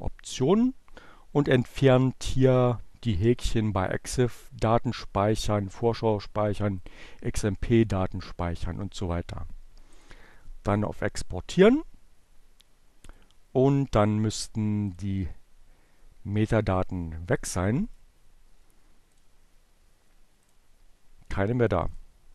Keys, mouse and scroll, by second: 1.8 click, 3.8 click, 5.8 click, 8.7 click, 12.1 click, 14.0 click, 15.5 click, 16.8 right click, 18.3 click, 20.3-21.3 drag, 22.0 right click.